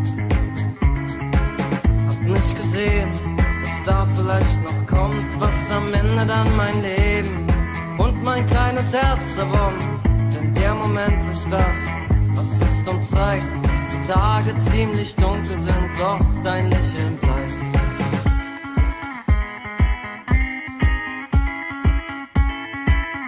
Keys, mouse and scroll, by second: 4.8 click, 8.7 Delete.